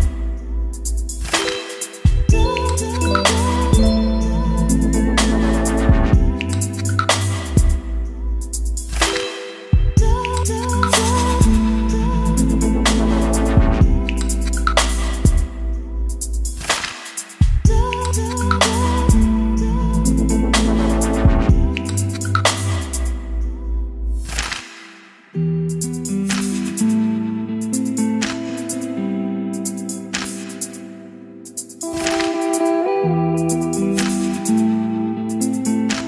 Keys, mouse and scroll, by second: 0.0-22.5 drag, 22.5-23.7 scroll down 2, 23.7-29.7 drag, 29.9 ctrl+s, 30.9-32.7 drag.